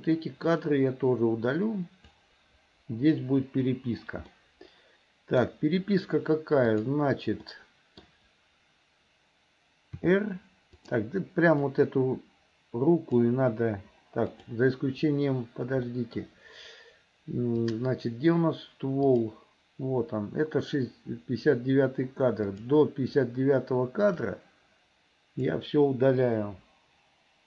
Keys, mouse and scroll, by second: 0.5-2.2 drag, 3.5 Delete, 4.4-5.4 middle drag, 6.7 click, 7.5 middle click, 10.0 r, 11.6-13.2 drag, 14.3 click, 15.9 middle click, 17.7 click, 19.0 click, 22.5 click, 24.2-25.5 drag, 26.5 Delete.